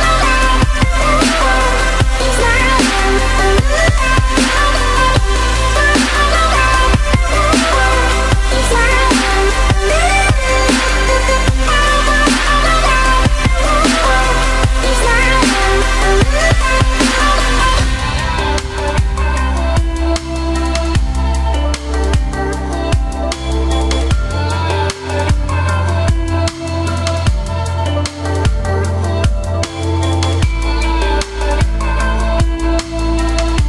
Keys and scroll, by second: 25.8 ctrl+i.